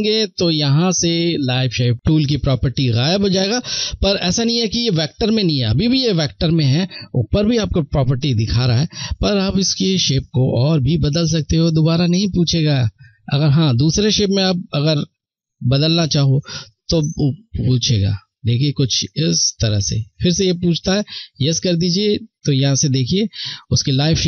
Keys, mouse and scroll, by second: 8.3 click.